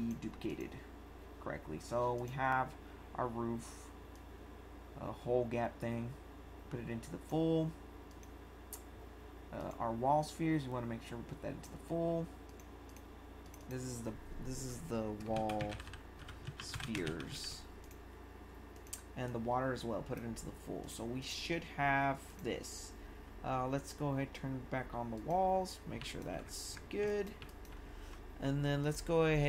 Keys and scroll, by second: 15.1-17.7 typing, 26.0 1.